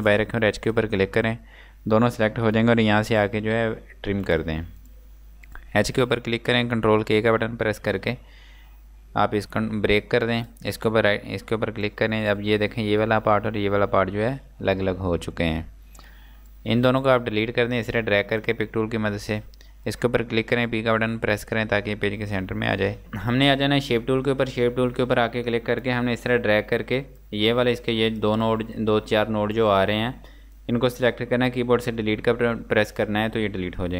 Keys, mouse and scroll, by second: 0.5 shift+click, 4.7 click, 7.2 ctrl+k, 9.4 click, 16.4 click, 19.2 Delete, 19.9 click, 21.0 p, 27.2 click, 33.8 click.